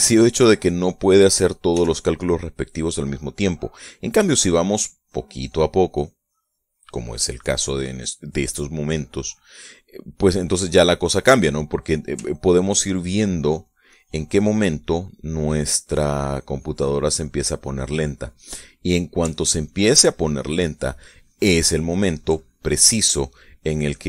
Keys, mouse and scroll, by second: 0.1 shift+click, 0.7 shift+click, 0.8 shift+middle click, 2.4 f, 3.0 click, 4.8 click, 5.3 click, 9.0 middle click, 10.1-11.3 middle drag, 12.2 middle click, 13.0-19.8 ctrl+drag, 20.0-23.0 ctrl+drag, 23.0 ctrl+middle click.